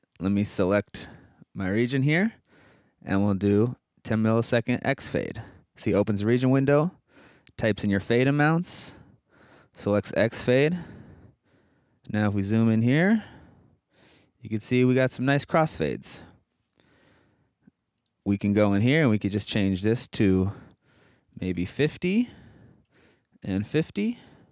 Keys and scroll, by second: 11.5 super+Right, 12.4 super+Up, 12.9 super+Down, 14.0 super+Right, 14.9 super+Left, 19.4-24.3 typing.